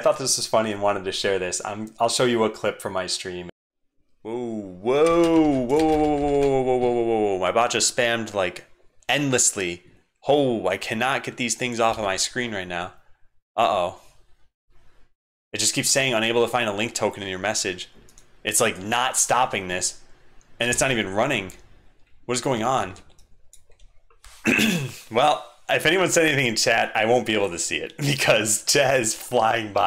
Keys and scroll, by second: 3.8 ctrl+Right, 5.1 alt+shift+Caps_Lock, 5.1 alt+shift+super+x, 5.8 ctrl+c, 5.9 ctrl+c, 6.1 ctrl+c, 11.9 super+3, 18.6 super+Right, 20.7 alt+super+x, 21.5 ctrl+Tab, 22.8 super+1.